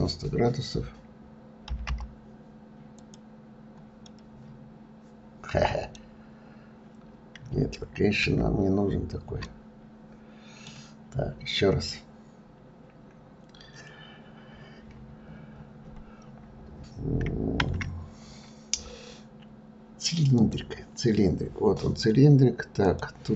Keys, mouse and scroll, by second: 4.0-6.0 middle drag, 6.0-8.2 scroll down 5, 8.2 ctrl+z, 9.4-11.0 middle drag, 11.0-11.3 scroll up 2, 14.0 scroll up 4, 14.2-15.2 scroll down 13, 15.2-15.8 scroll up 10, 17.6 shift+a, 22.8-23.3 drag.